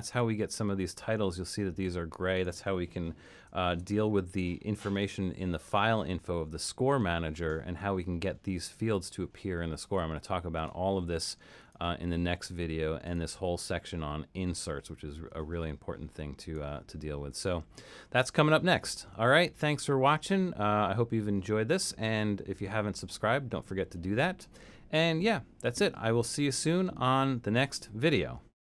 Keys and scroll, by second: 3.7 super+k.